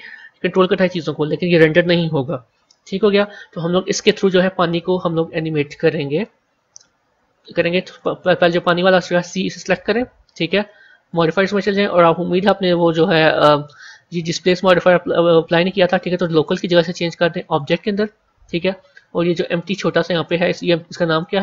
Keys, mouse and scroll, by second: 7.7 click, 11.0 click, 16.2-19.3 drag.